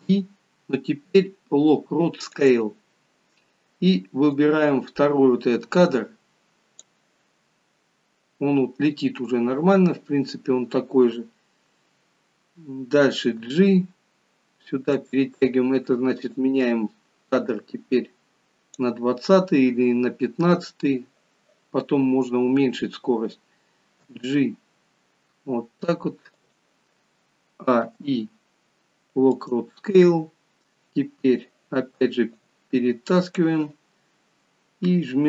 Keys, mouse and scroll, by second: 4.4 click, 13.5 g, 16.3 click, 24.0 g, 27.6 a, 27.8 i, 32.3 click.